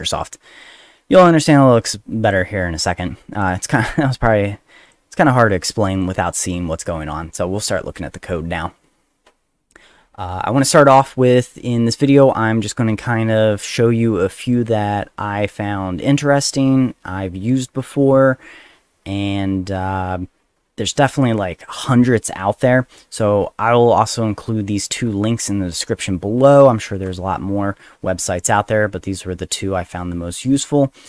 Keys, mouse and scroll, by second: 2.2 click, 3.3 click, 4.1 click, 4.8 click, 5.5 middle click, 5.9 click.